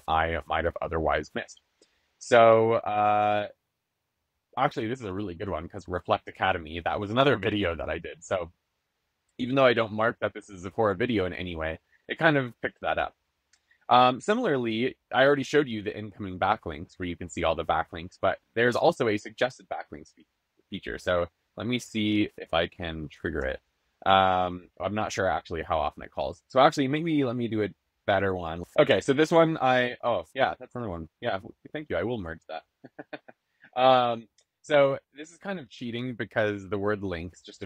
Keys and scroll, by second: 22.3 BackSpace.